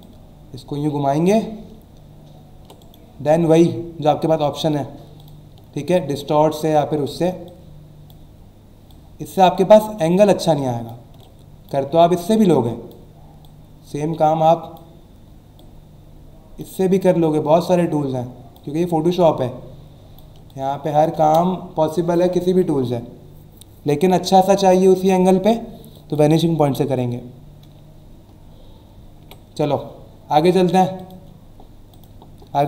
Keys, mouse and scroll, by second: 0.0 click, 2.8 right click, 5.2 click, 5.9 ctrl+click, 7.5 ctrl+click, 8.9 ctrl+click, 10.0 ctrl+click, 12.3 ctrl+click, 15.6 ctrl+click, 17.6 ctrl+click, 19.2 ctrl+click, 21.2 Return, 25.9 click, 29.2 Delete, 31.0 click, 31.9 click.